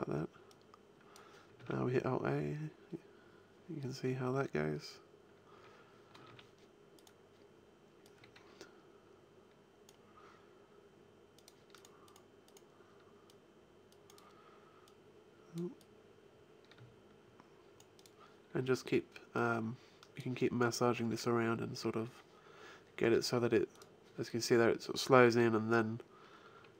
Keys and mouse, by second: 1.5 alt+a, 6.1 alt+a, 6.8-8.0 right drag, 11.6-15.0 drag, 20.9 alt+a.